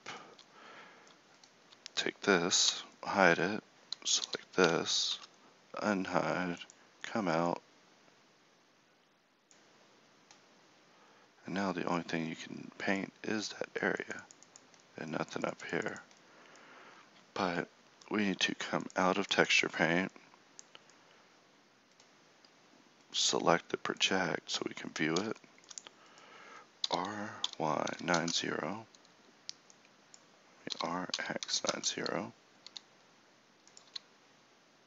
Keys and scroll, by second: 2.6 h, 4.2 l, 5.1 Tab, 26.8 r, 30.7 r, 32.6 g, 33.9 s.